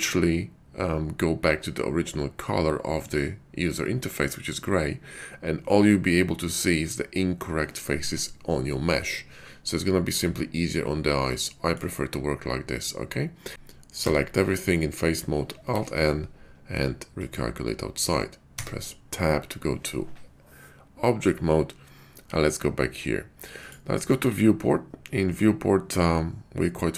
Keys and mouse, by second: 8.6-11.7 middle drag, 13.5 Tab, 13.8 a, 15.6 alt+n, 18.4 Tab.